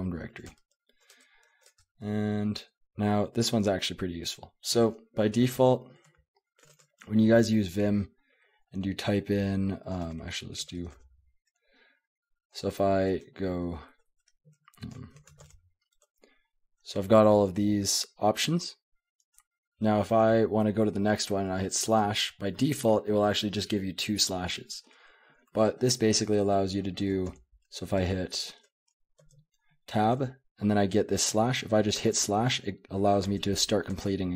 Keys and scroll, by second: 0.0-3.2 typing, 1.1 Return, 1.7 Return, 5.4-6.7 typing, 6.1 Escape, 10.0 Escape, 10.6-10.9 typing, 14.0 BackSpace, 14.2 BackSpace, 15.2 *, 15.4 Tab, 16.0 Tab, 16.8 Tab, 17.5 Tab, 21.9 /, 23.2 /, 27.0 BackSpace, 27.3 Tab, 28.0 BackSpace, 28.2 BackSpace, 29.2 Tab, 30.1 Tab, 32.0 /, 33.2 Tab, 33.9 Tab.